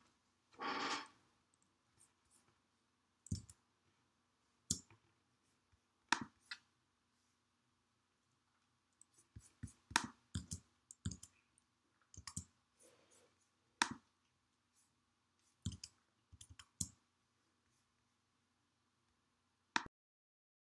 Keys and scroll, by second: 11.3 super+Tab, 12.0 super+Tab, 13.0 super+Tab, 16.6 super+Tab, 17.2 super+Tab, 17.4 super+Tab.